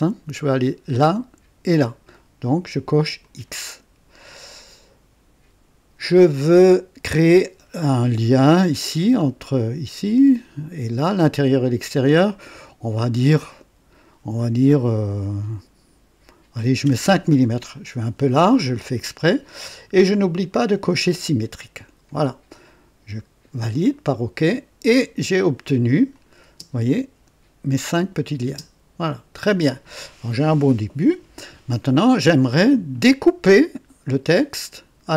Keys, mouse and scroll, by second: 3.1 click, 13.4-14.1 drag, 16.8 KP_5, 20.2 click, 23.7 click, 26.1 click, 26.4 space, 28.4 space.